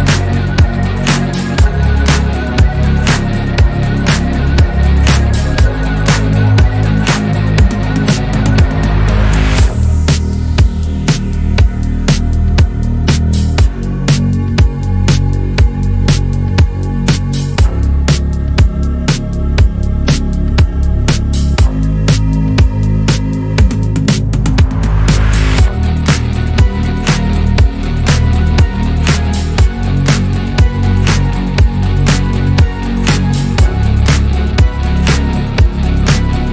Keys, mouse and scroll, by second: 0.3-0.8 shift+middle drag, 0.8 scroll down 3, 1.1-1.4 middle drag, 1.4 scroll up 2, 1.7-2.5 shift+middle drag, 2.5 shift+a, 9.5 shift+a, 16.8-18.6 drag, 18.8 click, 19.3 click, 20.3 click, 21.3-21.9 shift+middle drag, 21.9 s, 22.9-23.5 scroll up 4, 23.5 click, 24.6 KP_1, 25.1-26.0 scroll up 1, 26.0 click, 27.6 click, 29.2 KP_3, 29.9-30.3 scroll down 1, 30.3 click, 30.7-31.3 shift+middle drag, 31.3 click, 32.5 alt+z, 32.8-34.9 scroll up 2, 35.3 click.